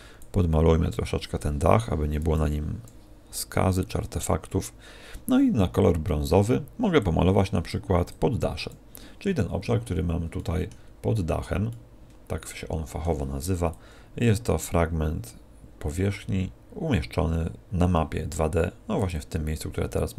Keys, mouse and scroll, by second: 1.7 click, 2.3 click, 6.9 click, 8.0 click, 10.3 middle click, 10.8-11.9 scroll down 7, 11.6 middle click, 13.7 click, 19.1 click.